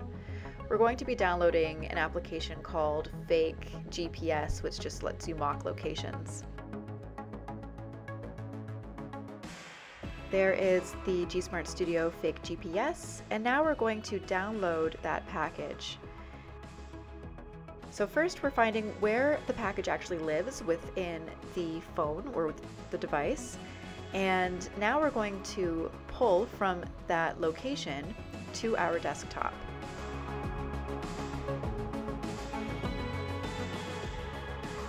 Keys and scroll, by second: 0.2 Return, 4.7 shift+Page_Up, 7.4 shift+Page_Up, 13.6-16.6 typing, 17.7 ctrl+v, 22.1-23.5 typing, 24.8-26.5 typing, 30.1-34.8 typing.